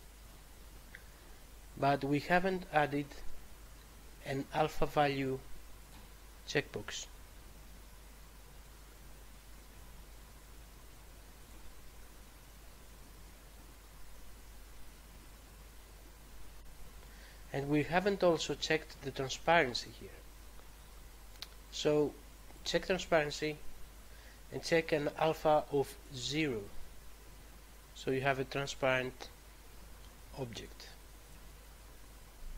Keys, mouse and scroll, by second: 5.7 click, 11.4 click, 16.7-17.5 scroll down 1, 17.5 scroll down 1, 22.4 click, 26.0 click.